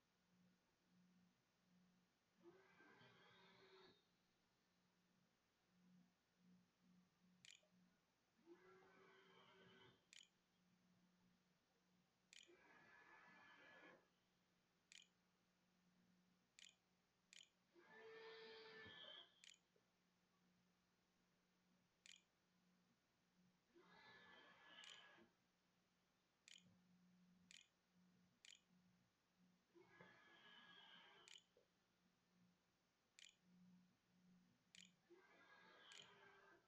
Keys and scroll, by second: 6.3 Down, 6.4 Right, 6.7 Insert, 6.9 Return, 9.4 ;, 11.0 k, 12.1 BackSpace, 14.5-21.0 typing, 21.9 Tab, 23.3-30.2 typing, 31.1 Tab, 31.3-34.5 typing, 35.7-36.6 typing.